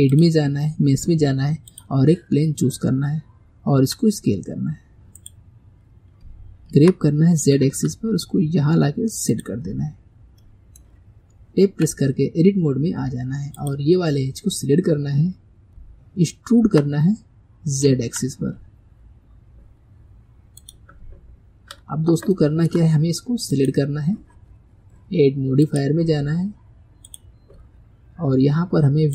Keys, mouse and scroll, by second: 0.1-3.2 drag, 3.8 s, 6.7 g, 10.4-11.7 middle drag, 11.7 Tab, 13.6-15.1 drag, 15.1-16.6 scroll down 1, 16.6 e, 21.2-22.4 scroll up 4, 22.4-23.5 shift+middle drag, 23.5 click, 25.7-27.1 drag.